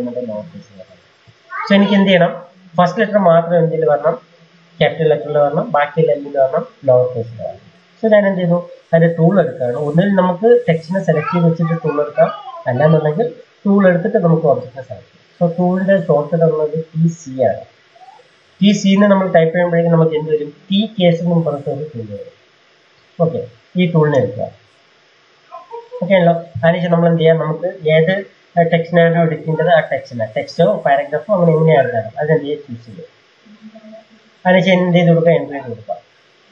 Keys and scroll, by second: 12.9 Escape, 15.5 t, 17.0 c, 35.3 Return.